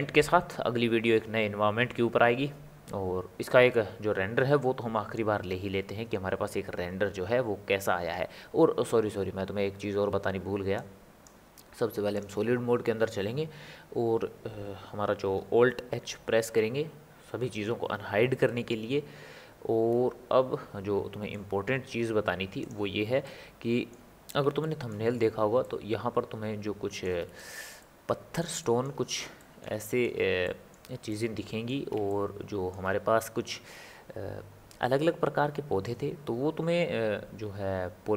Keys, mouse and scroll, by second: 10.7-12.5 drag, 16.5 alt+h, 18.5-21.5 ctrl+middle drag, 22.6 click, 23.2-35.1 middle drag.